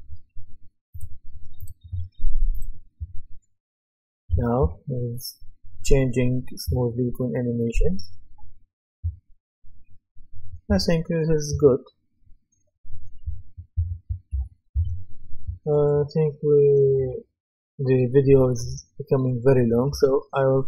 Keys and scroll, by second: 3.0 d, 4.6 a, 6.7 d, 7.8 w, 9.0 s, 10.7-12.0 typing, 13.2-14.6 typing, 14.7 Escape.